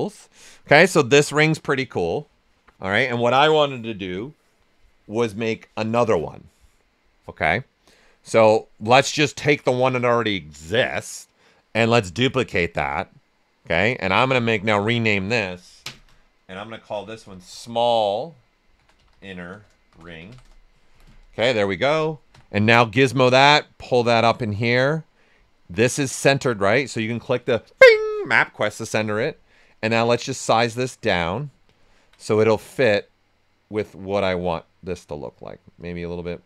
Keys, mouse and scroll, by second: 8.4 click, 11.9 click, 12.8 click, 14.8 click, 16.6-20.8 typing, 22.3 w, 22.5 right click, 23.3 click, 24.4 right click, 26.1 click, 29.7-31.6 drag, 31.3 right click, 31.6 right click, 32.9-36.4 drag.